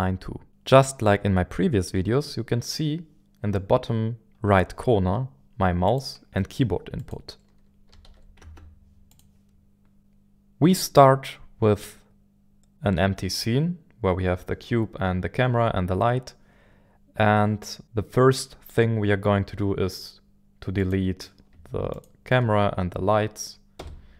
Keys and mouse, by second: 5.9 click, 6.5 right click, 7.1 click, 7.9 a, 8.0 w, 8.0 d, 8.4 space, 21.9 shift+click, 23.8 Delete.